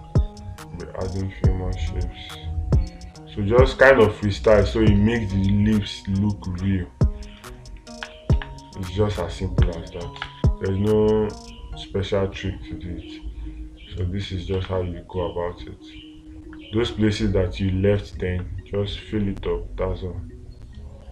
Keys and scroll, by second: 8.8 space, 10.6 space, 15.0 space.